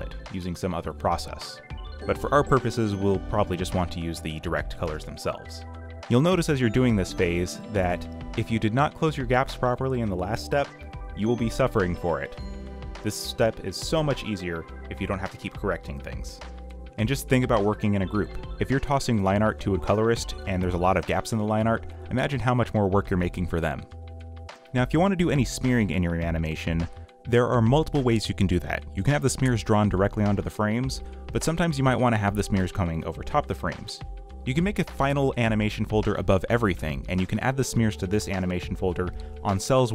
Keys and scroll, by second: 0.0-2.2 typing, 0.7 ctrl+z, 3.8-5.0 typing, 5.9 ctrl+z, 6.6-13.1 typing, 14.6 m, 14.9 ctrl+d, 15.1 ,, 17.2-19.0 typing, 21.6 ,, 22.2 space, 23.3 g, 25.0-28.2 typing, 29.2 ,, 29.5 b, 30.2 b, 30.7 ctrl+z, 32.4-34.5 typing, 36.2 ctrl+z, 36.5 space, 36.8 c, 38.3 ..